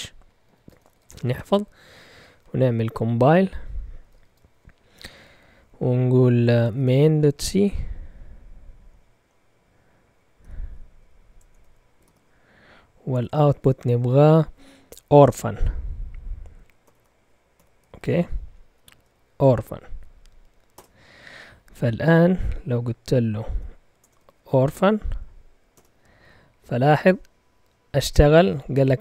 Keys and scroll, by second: 0.0-1.2 typing, 2.6-4.2 typing, 6.7-7.2 typing, 6.7 Tab, 10.4-14.2 typing, 11.0 Tab, 16.6-18.5 typing, 20.7 Return, 22.0 ., 23.2-24.1 typing, 24.3 Tab, 25.7 Return.